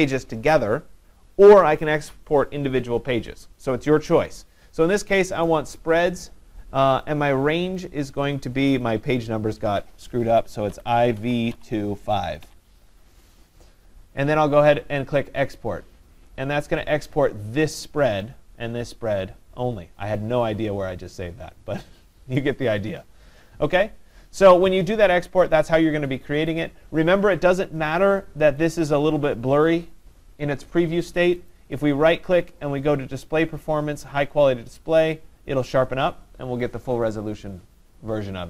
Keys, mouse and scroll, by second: 7.1 click, 7.8 click, 8.8 click, 10.9-12.5 typing, 15.6 click, 26.5 click, 28.7 click, 31.5 right click, 34.5 click.